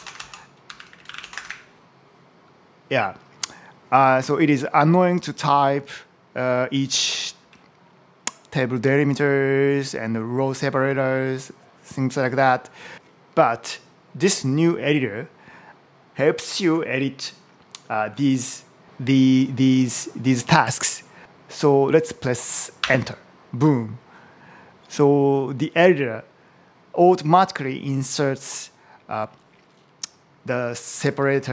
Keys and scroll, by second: 0.0-1.7 typing, 5.5 Left, 6.4 Right, 7.5 Right, 21.2 super+v, 22.6 Return, 31.1 Up, 31.2 Left.